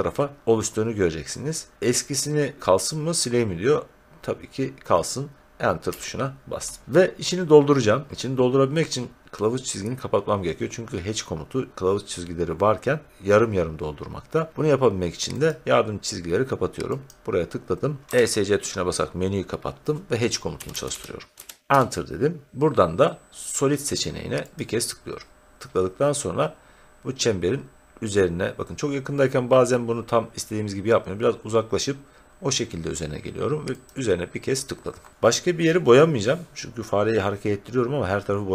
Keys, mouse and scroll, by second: 5.8 Return, 15.4 click, 17.1 click, 18.1 Escape, 20.3-21.8 typing, 24.5 click, 26.8 scroll, 26.9 scroll down 2, 28.1 scroll, 28.2 scroll down 2, 28.3-29.5 scroll down 1, 30.5 scroll down 1, 30.6-33.3 scroll down 2, 33.8 click.